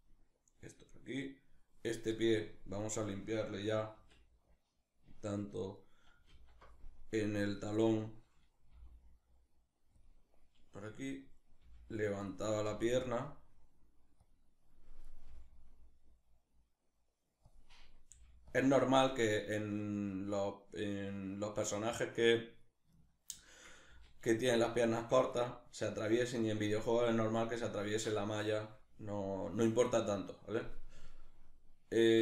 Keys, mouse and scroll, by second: 0.9 right click, 2.4 right click, 3.6 alt+r, 5.4 right click, 5.9 alt+r, 7.2 right click, 8.3 g, 9.7 click, 11.3 g, 11.9 click, 12.3 g, 13.9 click, 14.7 right click, 14.9 g, 17.1 click, 17.7 g, 18.1 click, 21.9 right click, 22.7-24.3 shift+middle drag, 23.5 r, 24.3 click, 28.0-32.2 shift+middle drag.